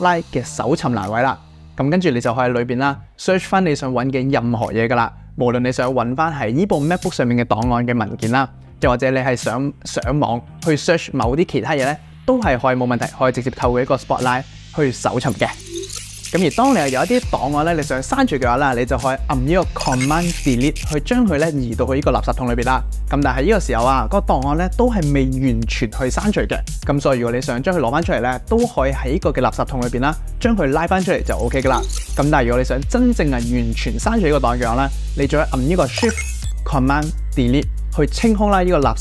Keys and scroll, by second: 7.2 super+space, 20.7 super+BackSpace, 34.9 super+BackSpace, 37.9 shift+super+BackSpace.